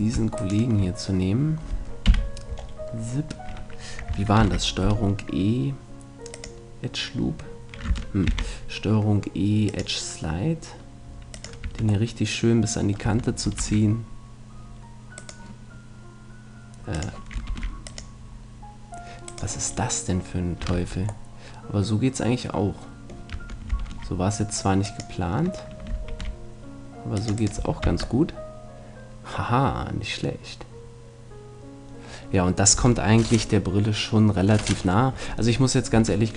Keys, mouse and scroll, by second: 2.0 KP_3, 4.4 ctrl+e, 8.3 ctrl+e, 11.6-13.2 drag, 11.6 Tab, 13.0 Tab, 13.6 ctrl+r, 15.3-17.2 right drag, 17.0-19.8 drag, 17.5 ctrl+r, 19.3 right click, 19.7 middle click, 20.8 Tab, 23.3 Tab, 23.9 ctrl+r, 25.0-26.1 drag, 26.1 ctrl+r, 27.4 click, 27.4 right click, 27.6 a, 27.8 Tab, 28.2 click, 28.2 middle click, 28.2 right click, 28.8 click, 28.8 middle click, 28.8 right click, 35.6 middle click, 36.0 Tab.